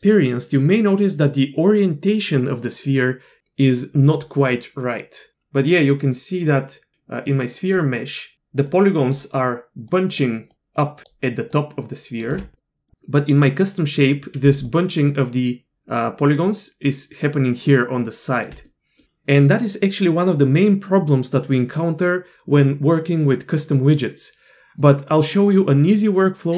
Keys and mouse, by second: 8.3-11.5 d, 9.1-10.5 drag, 11.0 click, 11.5 click, 12.3 d, 12.6 drag, 14.4-18.5 d, 14.6-18.5 drag, 18.7 click.